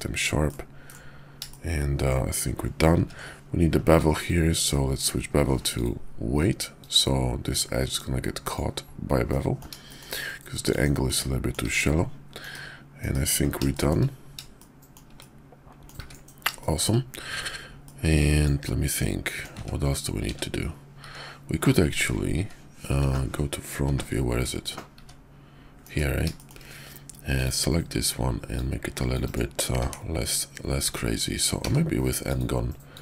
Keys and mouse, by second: 0.3-0.9 drag, 1.5 shift+click, 2.9 ctrl+`, 9.3 middle click, 9.9 shift+middle click, 10.5 click, 11.1-11.5 middle drag, 11.5 click, 11.5 right click, 11.6 `, 12.3 KP_5, 13.0 KP_5, 13.7 shift+drag, 14.5 shift+click, 14.6-14.9 shift+middle drag, 15.1-15.9 middle drag, 16.0 `, 16.5 shift+middle click, 17.8-19.4 middle drag, 19.5-25.7 typing, 26.4 shift+middle click, 28.5 click, 29.8 d, 31.5 d, 32.8-33.0 drag.